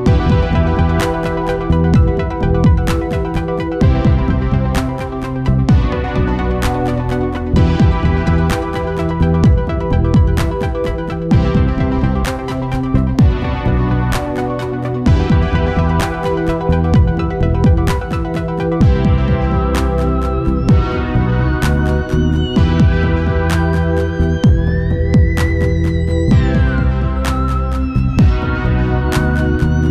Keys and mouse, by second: 1.4 middle click, 2.0 Tab, 2.9-4.6 drag, 3.9 ctrl+s, 5.0-6.9 drag, 6.3-7.3 middle drag, 6.3 right click, 7.9-9.8 drag, 10.4-12.3 drag, 13.2-15.0 drag, 14.0 ctrl+s, 17.4-19.4 right drag, 19.8 ctrl+z, 21.8-24.6 drag, 24.9-26.9 right drag, 26.0-27.7 drag, 26.8 middle click, 28.9 middle click, 29.3 middle click, 29.6-29.9 middle drag.